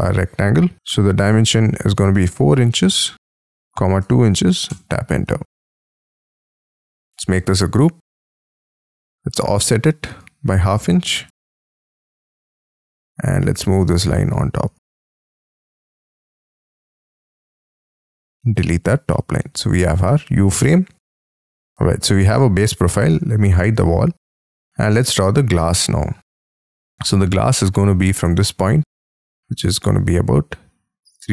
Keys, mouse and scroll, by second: 0.8 Escape, 2.1-4.2 typing, 4.6 Return, 5.2 space, 6.0-6.5 scroll up 5, 7.0 g, 7.5 double click, 8.0 middle click, 8.4 f, 8.7-10.7 scroll up 3, 10.7-12.6 typing, 12.1 Return, 14.0 double click, 14.3 m, 14.9 m, 17.9 shift+click, 18.2 e, 19.1 middle click, 19.4 space, 20.0 middle click, 21.3 Escape, 21.7 scroll down 7, 22.2-23.0 scroll up 6, 23.0 F2, 23.5 middle click, 24.5-24.9 scroll up 2, 24.9 r, 25.5 space, 26.6 space, 27.7 scroll down 5, 29.6 Up, 31.1 3.